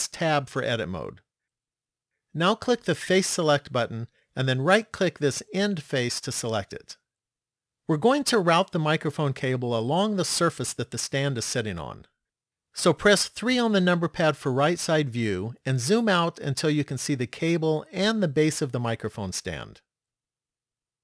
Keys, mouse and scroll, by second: 0.1 Tab, 3.2 click, 5.2 right click, 13.4 KP_3, 15.3-17.2 scroll down 5, 17.4-18.4 scroll down 1, 18.7 shift+middle click.